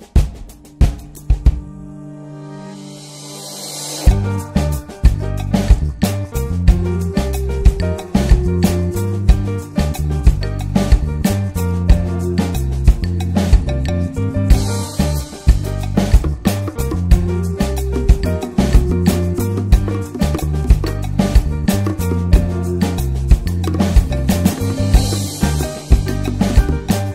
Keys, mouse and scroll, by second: 7.6 scroll down 3, 7.7 middle drag, 7.9 click, 8.3-9.3 scroll up 2, 9.3-11.1 drag, 11.1-12.0 scroll up 1, 12.0-14.6 drag, 15.9 scroll down 2, 16.1-20.1 middle drag, 20.1 scroll up 2, 20.4 shift+middle click, 20.8-21.2 scroll up 2, 21.0 ctrl+s, 23.4 ctrl+shift+click, 23.7 click, 24.6 ctrl+t, 25.0 middle click, 25.2-27.1 scroll up 2, 25.4 middle click.